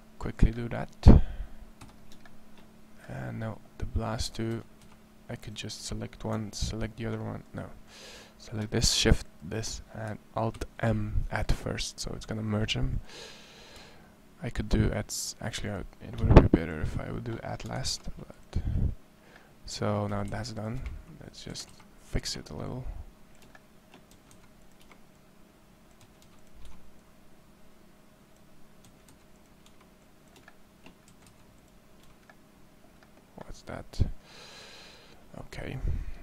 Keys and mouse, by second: 1.6 z, 4.3 a, 4.9 c, 10.3 alt+m, 12.0 alt+m, 12.7 a, 13.9 a, 17.6 alt+m, 19.9 a, 20.1 c, 21.3 a, 21.5 c, 23.9 a, 24.1 c, 25.9 a, 26.8 c, 28.9 a, 28.9 c, 29.8-30.9 right drag, 30.9 a, 31.1 c, 36.1 a.